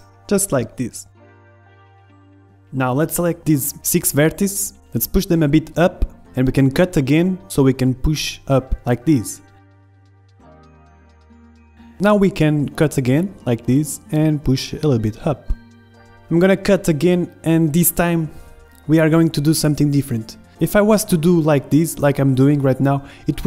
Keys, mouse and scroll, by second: 2.1 a, 2.1 z, 3.2 a, 3.5 a, 3.7 b, 4.8-6.4 drag, 6.4 a, 7.0 ctrl+r, 9.3 a, 9.5 b, 10.4-11.6 drag, 12.3-13.7 middle drag, 13.0 ctrl+r, 13.7 click, 14.2 a, 14.4 b, 14.9 click, 15.3 ctrl+shift+z, 15.3 middle click, 15.3 KP_1, 16.0 Tab, 16.1 Tab, 17.5 ctrl+r, 17.6 middle click, 18.4-20.2 middle drag, 20.3 ctrl+r, 21.6 a, 21.7 b, 22.5 click.